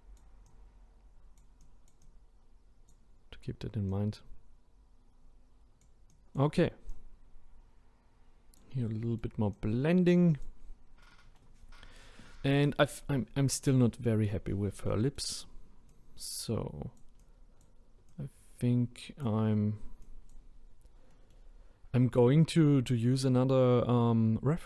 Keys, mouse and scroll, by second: 8.9-9.5 middle drag, 9.5-10.7 drag, 10.7-11.0 scroll down 1, 11.1-11.9 middle drag, 11.9 scroll down 1, 12.7 middle click, 13.2-13.8 scroll up 2, 13.8-14.4 middle drag, 14.4 scroll up 1, 14.9-15.9 middle drag, 15.9-20.7 drag, 20.7-21.1 scroll down 2, 21.1-21.8 middle drag, 21.8-22.7 scroll down 1.